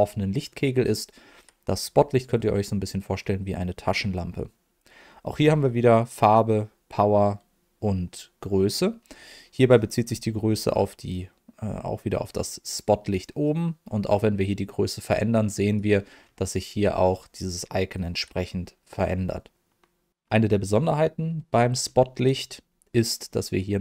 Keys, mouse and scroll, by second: 10.7-15.7 drag, 17.9-20.1 drag.